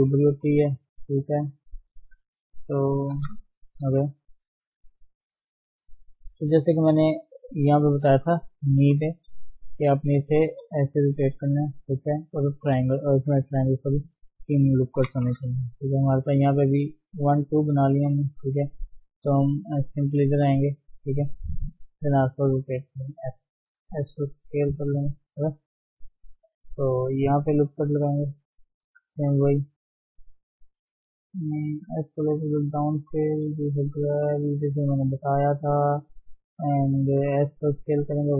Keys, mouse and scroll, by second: 0.1 g, 1.2 s, 2.0-3.1 shift+middle drag, 3.1 g, 4.0 shift+middle click, 4.2-5.5 shift+scroll up 1, 5.7 ctrl+r, 7.2-7.5 scroll down 3, 7.5 shift+middle click, 8.3-8.7 shift+scroll down 1, 8.9 KP_3, 9.1-9.5 scroll up 2, 9.5-11.2 shift+middle drag, 11.2-12.7 drag, 12.7 d, 14.5-14.9 scroll down 2, 14.9 KP_1, 15.7 shift+middle click, 15.9-16.6 scroll up 2, 16.1 shift+middle click, 16.6 shift+middle click, 16.9 scroll up 1, 18.7-19.0 scroll down 4, 19.0 middle click, 19.8 shift+z, 20.0-21.9 middle drag, 21.9 r, 25.5-25.8 scroll up 1, 25.8-27.7 shift+middle drag, 27.7 ctrl+r, 29.1 r, 30.2 shift+middle click, 30.8 click, 31.2 alt+shift+click, 31.9 s, 33.2 g, 34.3 click, 34.7 alt+shift+click, 35.6-37.2 scroll down 1, 37.2 s.